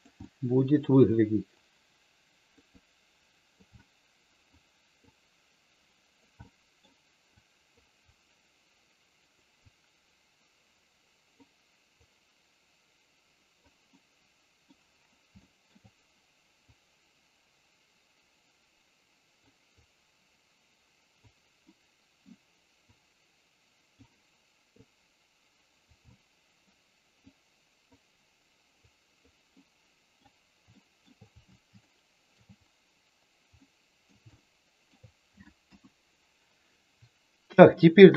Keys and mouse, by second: 0.3 middle click, 1.6 click, 2.8 click, 3.8 middle click, 5.1-6.1 drag, 6.4 middle click, 7.4 click, 8.0-9.3 drag, 9.6-11.4 drag, 12.0-13.6 drag, 13.9 middle click, 15.4 shift+middle click, 16.8-19.4 drag, 19.6-21.1 drag, 21.6 middle click, 22.9-23.9 drag, 24.8-25.9 drag, 26.0 middle click, 27.3 click, 28.9 click, 29.5 middle click, 30.6 shift+middle click, 31.8 shift+middle click, 33.5 middle click, 34.3 shift+middle click, 35.6 KP_1.